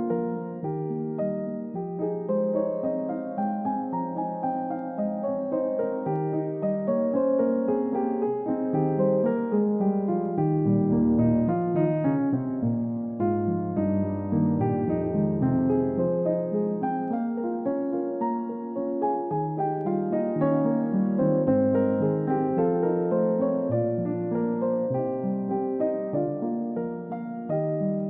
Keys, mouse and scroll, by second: 9.3-9.7 scroll down 1, 10.1-11.9 scroll up 1, 14.3 scroll down 1, 14.8 middle click, 15.3-16.3 scroll up 1, 16.3 scroll down 1, 16.6 middle click, 17.3 scroll up 1, 17.7 double click, 18.0 scroll down 1, 18.4 middle click, 18.9-19.3 scroll up 1, 21.0-21.4 scroll down 1, 21.8-22.3 scroll up 1, 22.3-23.7 scroll down 1.